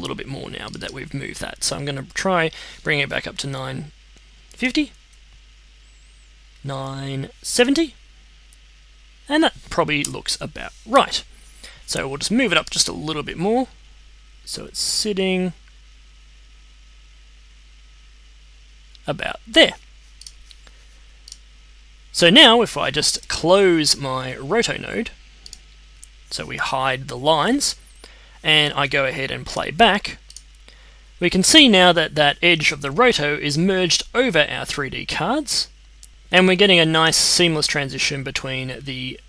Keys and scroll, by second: 3.3-5.1 typing, 7.3-8.2 typing, 9.9 Return.